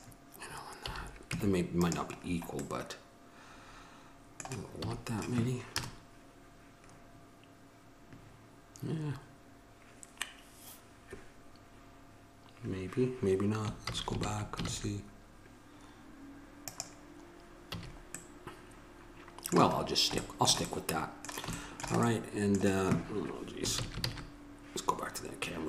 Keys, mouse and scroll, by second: 1.0 a, 1.5 Tab, 3.1 middle click, 5.0 a, 6.0 KP_0, 10.8-14.3 middle drag, 14.3 ctrl+z, 16.8-17.9 right drag, 17.9 a, 18.4-19.5 middle drag, 20.0-22.8 middle drag, 24.3 ctrl+z.